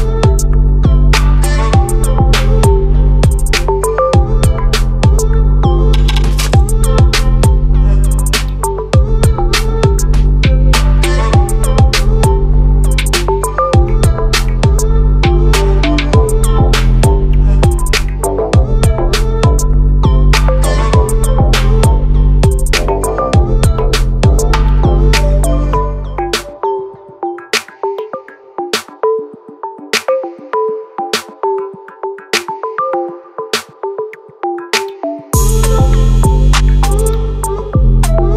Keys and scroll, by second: 0.8 ctrl+-, 3.6 ctrl+=, 12.3 ctrl+a, 30.3 ctrl+=, 37.8 ctrl+a.